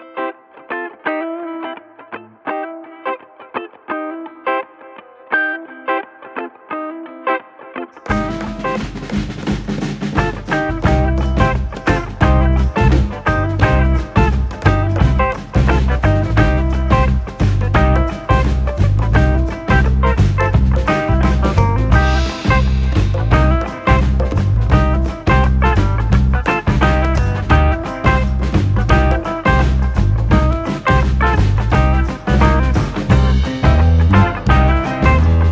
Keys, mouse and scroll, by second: 0.5 r, 1.6 scroll down 1, 1.8-2.1 shift+middle drag, 2.1 drag, 2.5 r, 3.4 click, 4.9 scroll down 4, 5.0-6.6 middle drag, 7.1 KP_1, 7.5 KP_9, 7.7 scroll up 4, 8.3 Tab, 9.7 a, 10.4 s, 12.1 shift+middle click, 12.5 Tab, 12.7 click, 13.0 click, 13.4-14.0 shift+middle drag, 14.0 click, 15.6 shift+middle drag, 15.8 click, 16.2 Tab, 16.5 a, 17.5 s, 18.7-19.3 scroll up 2, 19.4 shift+middle click, 19.8 r, 21.4 click, 21.8 ctrl+s, 21.9 scroll down 2, 22.1 middle click, 23.0 Tab, 23.1 click, 23.3-23.8 scroll down 2, 23.8-24.7 shift+middle drag, 24.7 scroll up 1, 24.8-25.5 shift+middle drag, 25.5 KP_1, 25.8 scroll up 1, 25.9-27.0 shift+middle drag, 27.3-28.3 drag, 28.7-29.1 scroll down 2, 29.1 Tab, 29.5 s, 30.4 s, 31.9 KP_Decimal, 32.3 /, 32.5 scroll down 4, 32.7 shift+middle click, 33.5 click, 33.8 click, 34.0 alt+/, 34.2 click, 34.4 scroll down 2, 34.5 shift+middle click, 34.8 click.